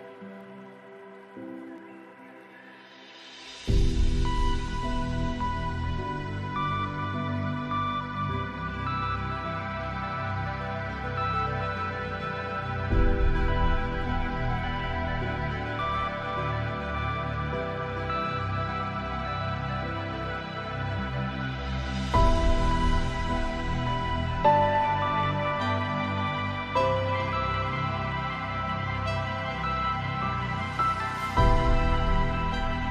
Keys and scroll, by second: 20.4 ctrl+v, 21.2 ctrl+a.